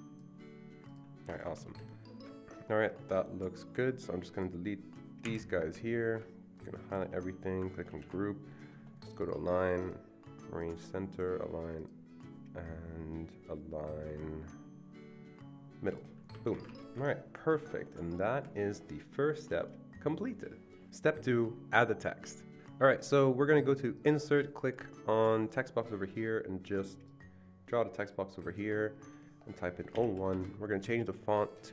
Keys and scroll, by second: 1.3 Escape, 1.5 Escape, 5.2 Delete, 7.9 ctrl+g, 16.3 Escape, 16.5 Escape, 16.6 Escape, 29.9-30.3 typing, 30.3 Escape.